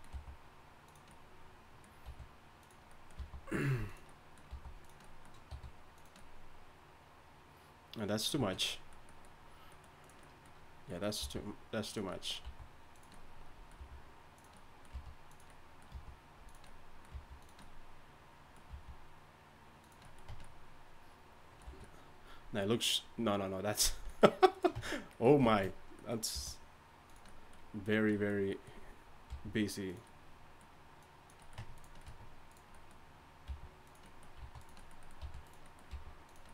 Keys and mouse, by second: 0.1 g, 2.0 r, 3.2 g, 4.5 g, 5.5 r, 10.0-12.0 right drag, 11.2 g, 12.4 s, 13.8 r, 14.9 g, 15.9 g, 17.1 g, 18.7 g, 20.3 Tab, 21.7 a, 24.7 Tab, 26.3 g, 29.3 g, 31.6 Tab, 32.1 Tab, 33.5 g, 34.4 s, 35.2 r, 35.9 g.